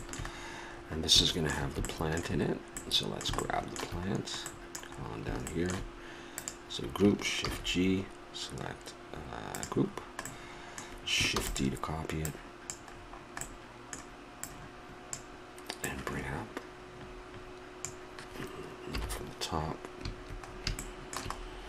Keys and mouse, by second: 1.3-2.5 middle drag, 4.8 middle click, 6.4-8.3 drag, 6.4-7.4 right drag, 7.4 shift+g, 11.3 shift+d, 12.2 click, 13.4 click, 13.6 click, 13.9 middle click, 17.5 middle click, 18.9 KP_7, 20.0-21.6 middle drag.